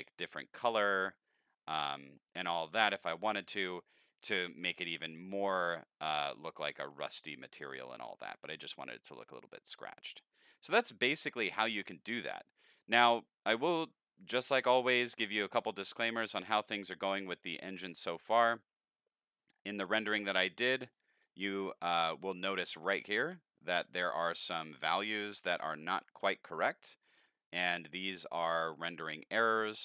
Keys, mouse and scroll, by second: 2.2 middle click, 5.2 middle click, 6.1 middle click, 11.1 middle click, 11.1 scroll down 1, 11.7 scroll down 1, 12.2 middle click, 12.9-14.2 middle drag, 14.8-16.1 drag, 16.8 click, 18.2 click, 20.9 middle click, 21.8 middle click, 25.8 middle click, 26.8 middle click, 27.1 middle click.